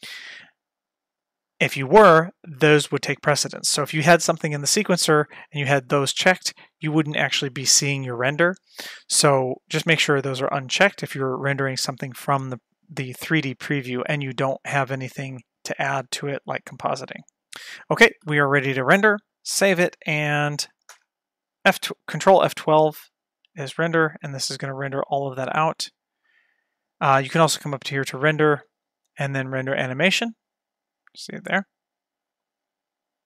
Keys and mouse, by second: 5.7 click, 16.1 click, 16.5 click, 18.2 ctrl+s, 19.6 ctrl+s, 21.8 ctrl+F12, 28.5-32.0 drag.